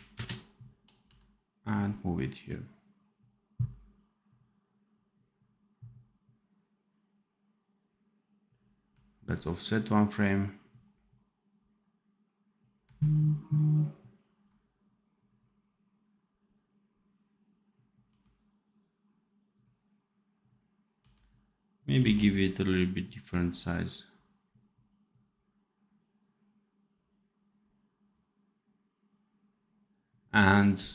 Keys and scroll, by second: 0.9 v, 18.0 d, 20.9 d, 21.9 x.